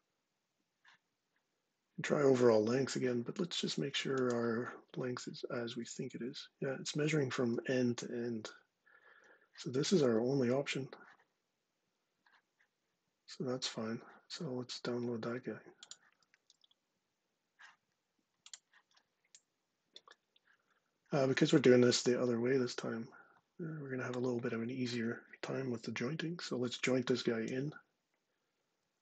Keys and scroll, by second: 27.3 j.